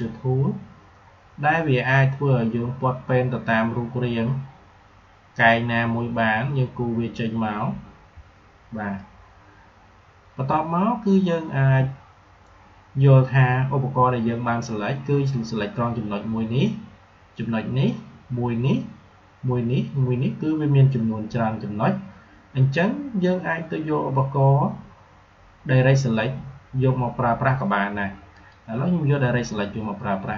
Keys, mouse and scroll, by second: 28.2 click.